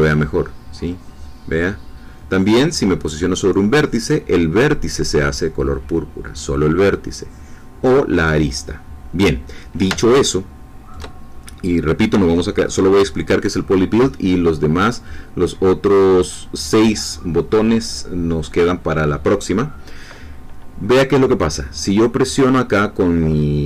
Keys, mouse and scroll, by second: 10.3 shift+middle click.